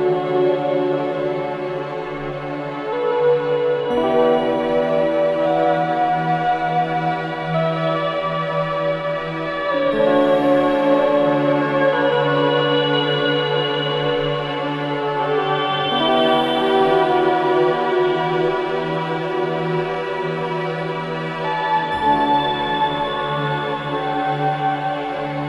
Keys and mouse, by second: 0.2-1.3 drag, 1.3-1.8 typing, 2.3-3.2 drag, 3.9 click, 5.0 typing, 6.4 click, 7.7 right click, 7.8 click, 8.7 typing, 10.9 right click, 11.4 click, 12.7 typing, 13.7 right click, 14.3 click, 15.0 click, 15.0 typing, 15.8 click, 18.7 click, 21.0-21.4 typing, 22.9 click.